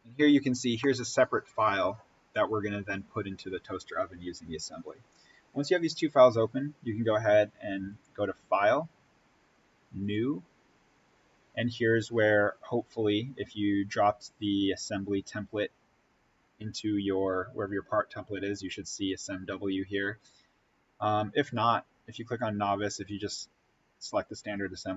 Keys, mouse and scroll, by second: 0.7-5.2 middle drag, 7.8 click, 20.9 click.